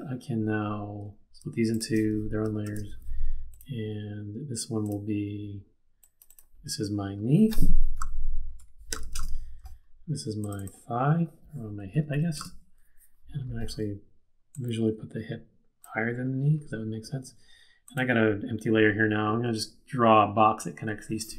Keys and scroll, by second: 2.6 shift+super+d, 7.9-9.4 typing, 11.5-12.5 typing.